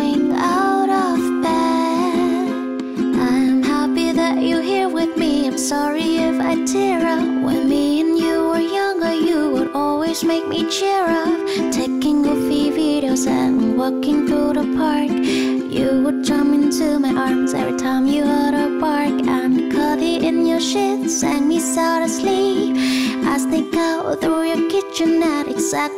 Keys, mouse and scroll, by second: 14.5 F9.